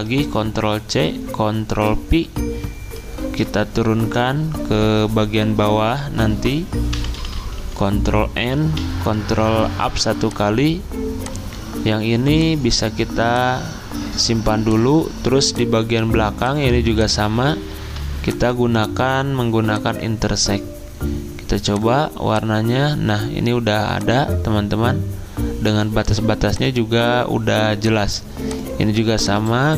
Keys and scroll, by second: 0.4 ctrl+c, 1.7 ctrl+v, 7.0 ctrl+Page_Down, 7.8 ctrl+End, 8.8 ctrl+Page_Up, 17.6 ctrl+z.